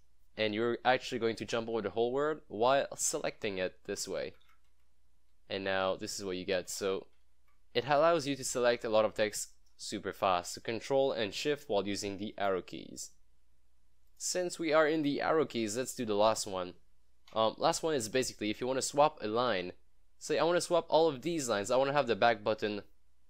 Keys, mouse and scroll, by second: 1.1 ctrl+shift+Left, 1.3 ctrl+shift+Right, 4.3 shift+Right, 6.5 shift+Left, 7.2 ctrl+shift+Left, 7.4 ctrl+shift+Right, 8.8 ctrl+shift+Left, 9.8 ctrl+shift+Right, 12.4 click, 14.7 scroll down 1, 15.1 scroll up 1, 16.8-22.1 drag.